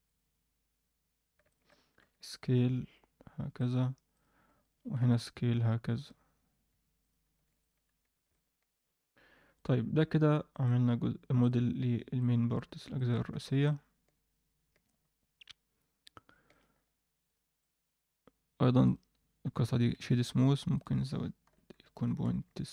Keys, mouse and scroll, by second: 0.0 click, 1.4 shift+click, 1.9 s, 4.1 click, 4.6 shift+click, 5.0 s, 6.3 scroll down 2, 6.4 Tab, 6.7 Tab, 6.9 click, 7.5 shift+click, 7.9 scroll down 2, 8.0 Tab, 8.2 middle click, 9.5 click, 10.4-11.4 drag, 12.1-12.5 drag, 12.9 shift+middle drag, 13.3 alt+a, 13.6-16.4 middle drag, 16.7-17.2 scroll up 1, 17.2 click, 17.6-19.7 right drag, 19.7 alt+a, 20.7-22.7 drag.